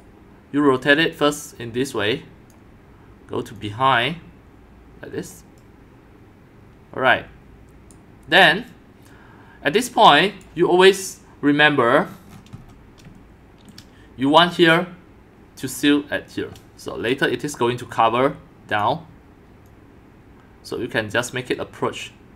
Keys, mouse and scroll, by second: 5.5 right click, 6.1-7.4 drag, 7.9 click, 8.1 click, 8.8-10.3 right drag, 10.3-12.1 drag, 12.1 scroll up 5, 12.3-13.1 scroll down 7, 13.1 scroll, 13.5-16.4 shift+drag, 16.4-16.8 shift+right drag, 18.7 click, 19.7-21.2 drag, 21.9-22.3 drag.